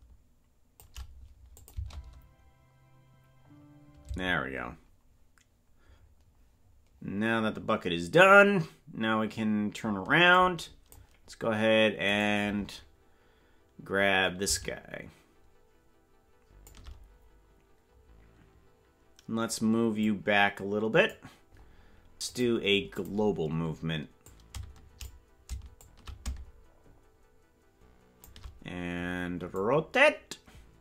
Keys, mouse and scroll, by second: 1.6-4.6 shift+drag, 1.7 space, 4.1 space, 10.3 click, 12.1 right click, 14.5-16.7 shift+drag, 19.9-21.1 drag, 22.3 click, 24.2 click, 25.8-28.3 shift+drag, 29.5-30.8 drag.